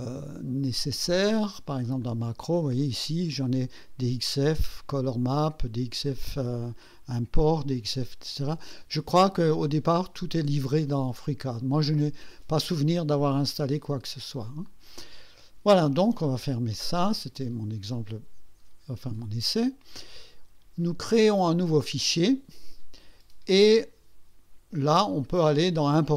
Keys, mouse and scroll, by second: 2.0 click, 14.6 click, 16.8 click, 19.2 click, 21.1 click, 25.1 click.